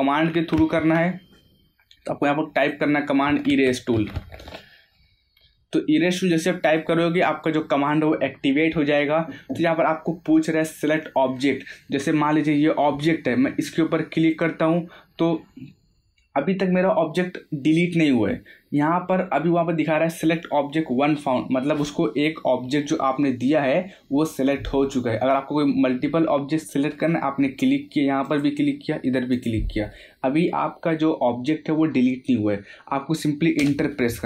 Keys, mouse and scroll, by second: 0.7 ctrl+z, 1.5-1.9 scroll down 1, 2.5 click, 3.0-4.6 typing, 6.1 middle click, 7.1-7.6 scroll up 1, 14.2 click, 28.2 click, 33.6 Return.